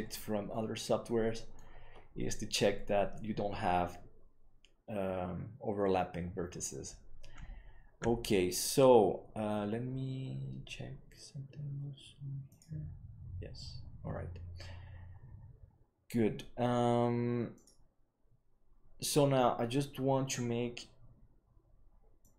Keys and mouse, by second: 0.4-1.5 middle drag, 22.2 click.